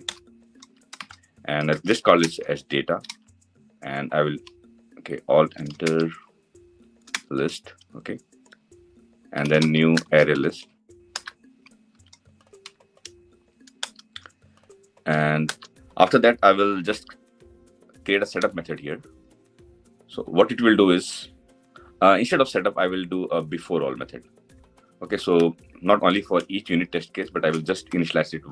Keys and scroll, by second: 5.7 alt+Return, 10.5 Return, 16.5 alt+Insert, 27.6 Delete.